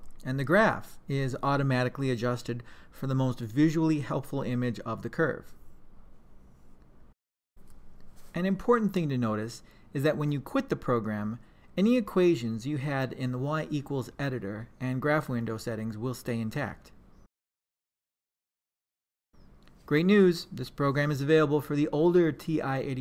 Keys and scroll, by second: 1.1 2, 10.1 Return, 11.6 4.